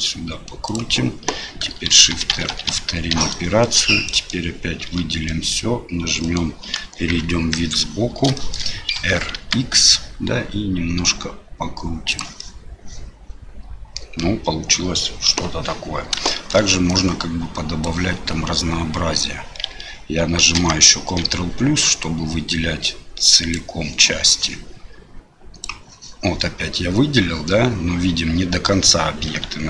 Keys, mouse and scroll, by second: 1.9-3.1 typing, 3.6 middle click, 4.2 middle click, 4.9 a, 5.3 middle click, 6.2 middle click, 6.7 KP_1, 7.3 KP_3, 8.4 shift+middle click, 9.0 r, 12.4-15.0 middle drag, 15.3 KP_7, 16.3 shift+middle click, 17.0 click, 20.6 ctrl+KP_Add, 22.0 click, 24.3-25.6 drag, 27.4-28.7 middle drag.